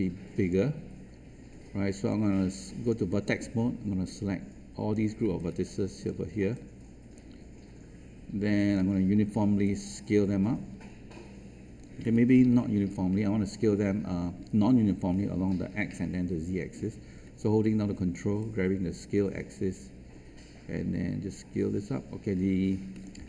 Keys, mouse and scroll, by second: 0.5-2.0 scroll up 1, 2.0-3.2 right drag, 4.0-5.2 drag, 5.2 space, 6.5-8.7 alt+drag, 9.6-12.2 drag, 18.3-23.0 ctrl+drag.